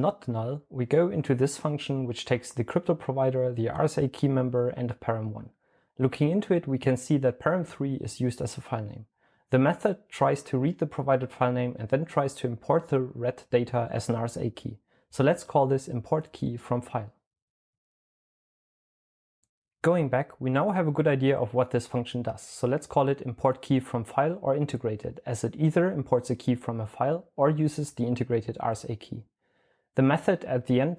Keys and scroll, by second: 21.0-22.2 typing, 23.4-26.2 typing.